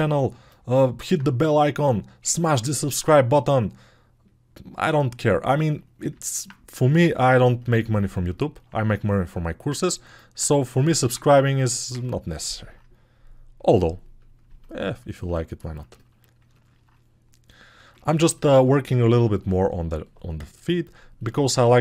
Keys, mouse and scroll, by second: 14.8-16.9 alt+drag, 14.8-16.9 alt+middle drag, 14.8-16.9 alt+right drag.